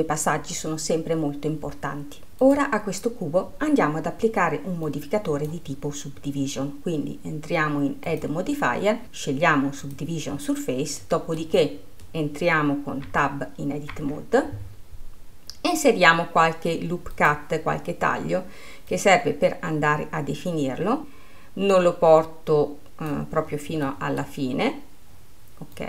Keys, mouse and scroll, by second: 2.7-8.2 drag, 8.3 click, 11.2-13.2 middle drag, 13.2 Tab.